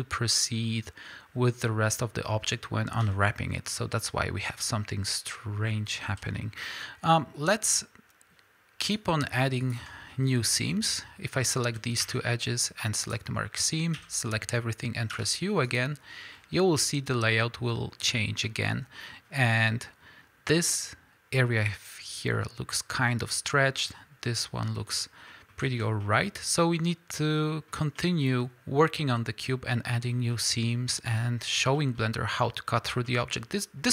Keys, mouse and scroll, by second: 3.0 a, 6.0 alt+a, 6.4-8.9 middle drag, 8.9 click, 9.7 shift+click, 10.1-11.4 middle drag, 13.2 ctrl+e, 14.0 a, 15.8 u, 25.3 middle click, 25.7 alt+a, 26.0-27.2 middle drag, 27.7-31.2 middle drag, 31.1 scroll up 2, 31.8 middle drag, 32.5-33.9 middle drag, 33.3-33.9 scroll down 2.